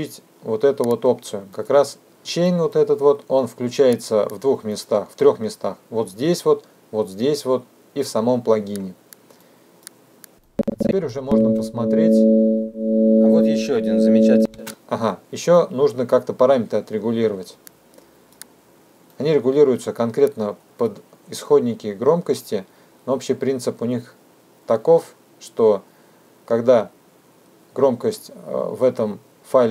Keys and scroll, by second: 11.4 space.